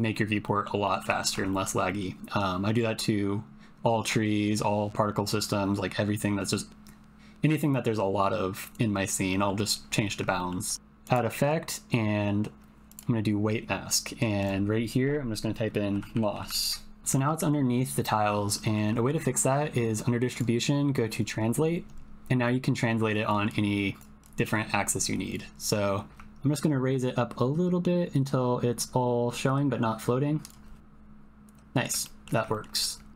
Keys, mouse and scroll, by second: 0.4 click, 0.8 middle click, 1.2 shift+middle click, 1.5 ctrl+middle click, 1.8 middle click, 9.3 middle click, 10.3 shift+middle click, 10.7 middle click, 11.1-13.0 drag, 14.4-17.0 drag, 16.4 s, 17.1 ctrl+middle click, 18.5 shift+middle click, 20.4 click, 22.5 click, 23.5 click, 24.3 click, 25.7-30.5 drag, 30.8 click, 30.8-31.9 middle drag, 32.0 ctrl+middle click, 32.6 shift+middle click, 32.8 ctrl+middle click.